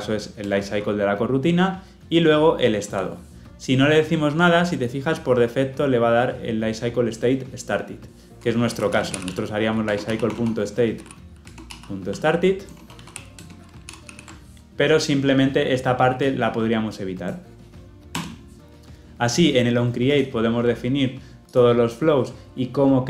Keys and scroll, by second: 0.3 Return, 9.8 Return, 13.8 ctrl+alt+l, 13.9 ctrl+alt+o.